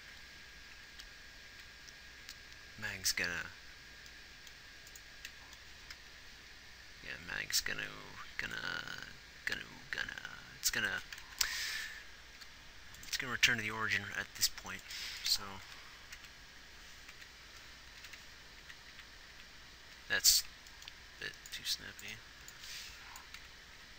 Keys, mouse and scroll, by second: 0.4 Right, 1.2 Left, 1.8 Right, 11.7 ctrl+z, 12.7 g, 16.0 Left, 16.5 Right, 17.5 Right, 18.4 Left, 18.6 Left, 19.3 Right, 19.7 Right, 20.3 Left, 20.6 Right, 23.8 Left.